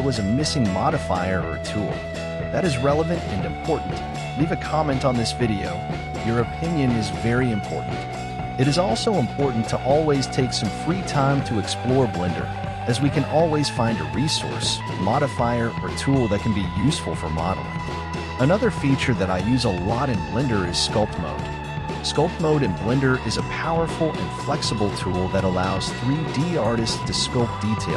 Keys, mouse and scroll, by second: 2.7-5.3 middle drag, 5.3-8.7 drag, 15.0 click, 23.2 KP_1, 24.7-27.1 drag.